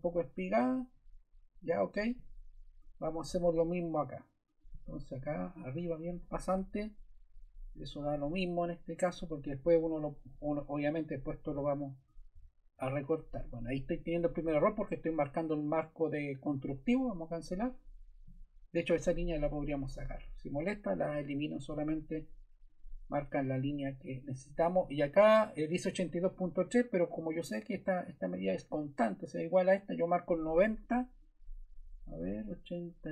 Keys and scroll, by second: 6.6 Escape, 19.4 BackSpace.